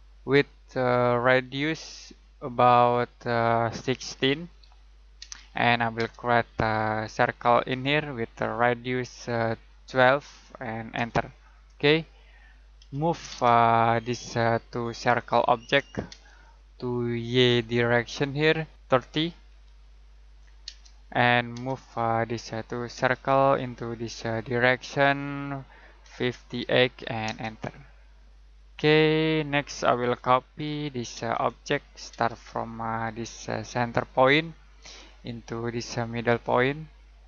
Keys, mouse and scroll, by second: 4.4-5.2 typing, 6.4-7.6 scroll up 1, 7.6 click, 9.4-10.4 typing, 10.9 Return, 11.7-12.3 scroll down 1, 12.3 middle click, 12.7 m, 13.3 space, 13.6 click, 16.1 space, 16.4 click, 19.0-19.5 typing, 20.6 space, 21.8 click, 22.9 space, 23.1 click, 26.0-27.2 typing, 28.0-28.6 scroll down 1, 28.6 middle click, 30.0-32.1 typing, 31.3 click, 34.0 click.